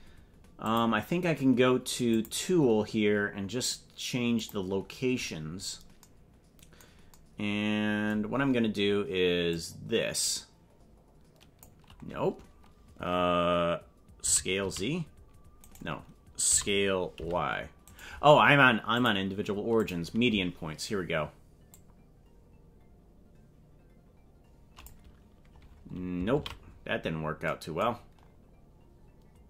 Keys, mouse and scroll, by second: 0.6 click, 2.2 click, 4.5 click, 9.5-11.8 drag, 14.2 s, 16.6 s, 18.9-19.9 drag, 21.7-25.0 drag, 25.6-26.2 scroll down 7, 26.5 ctrl+z, 28.2-28.6 scroll up 3.